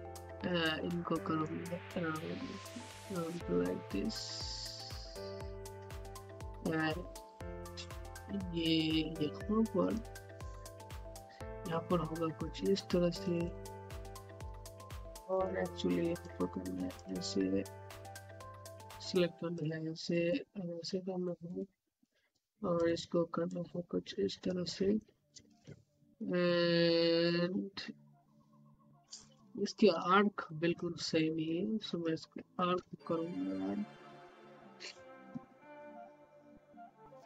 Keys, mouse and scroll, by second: 0.6 z, 1.4-7.0 drag, 7.0 ,, 9.7-13.3 drag, 13.6 scroll up 1, 14.0 alt+middle click, 14.4 scroll up 1, 15.3-20.2 drag, 20.2 click, 21.7 scroll down 1, 22.0 alt+middle click, 22.7-24.7 drag, 24.7 scroll down 1, 24.9 alt+middle click, 25.9-28.3 typing, 29.6 typing, 30.4 click, 33.1-35.9 typing.